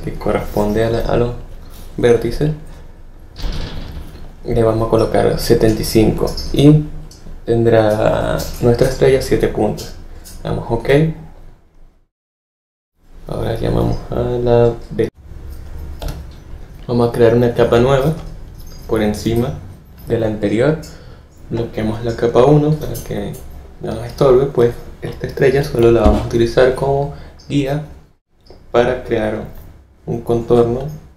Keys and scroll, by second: 16.0 F7, 26.0 p.